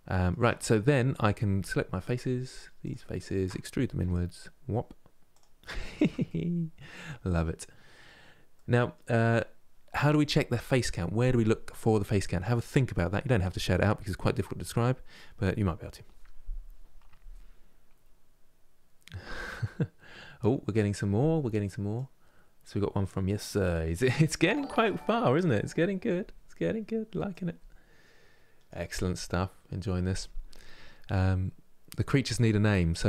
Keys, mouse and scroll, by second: 0.1 Tab, 0.4 middle click, 1.3 3, 1.8 click, 2.5-3.7 shift+drag, 3.7 e, 5.4 scroll down 1, 5.7 Tab, 6.0-7.7 middle drag, 7.7-8.2 scroll down 1, 8.2-33.0 middle drag.